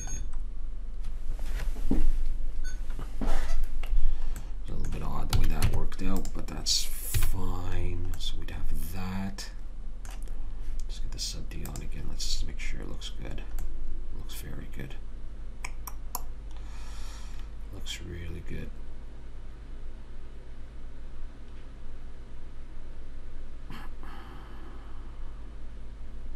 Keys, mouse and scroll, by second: 5.7 a, 6.0 Tab, 7.6 a, 7.7-10.6 middle drag, 12.1 click, 14.0-15.9 middle drag.